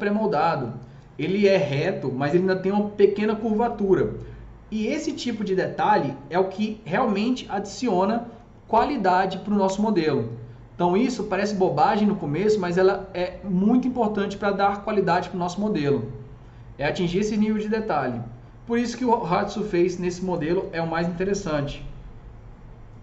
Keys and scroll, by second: 20.7-21.9 typing.